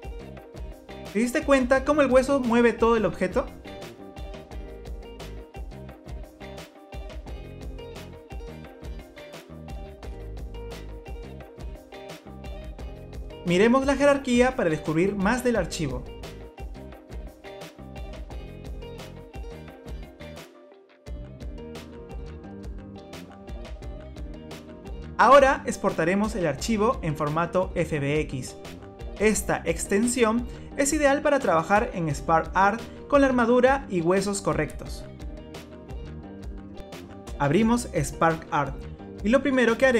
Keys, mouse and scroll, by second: 0.7 click, 1.4 r, 4.7 middle click, 6.7 click, 7.5 r, 10.7 middle click, 14.3 click, 17.2 click, 18.1 click, 18.3 click, 18.5-19.0 scroll down 3, 19.0 click, 19.3 scroll down 4, 20.0 click, 20.6 click, 21.2 middle click, 21.7 click, 22.4 click, 22.6 middle click, 24.0 ctrl+s, 27.6 click, 34.6 click.